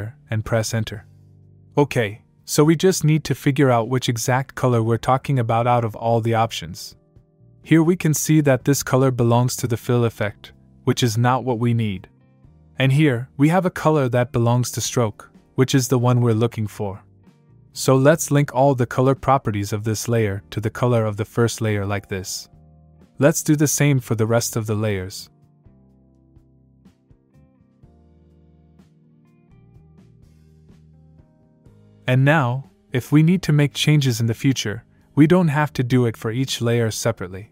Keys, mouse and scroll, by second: 0.0-1.2 typing, 2.9 click, 8.8 click, 13.0 click, 16.5 click, 20.1 click, 24.1 click, 26.1 click, 29.4 click, 30.1 click, 31.9-32.2 scroll down 1, 32.2 click, 32.9 click, 35.1 click, 37.0 click.